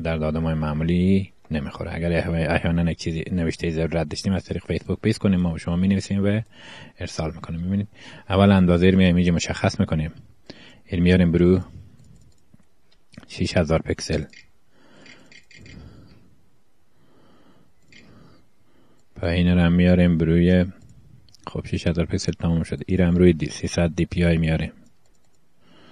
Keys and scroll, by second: 15.2 0, 17.2 Home, 17.4 BackSpace.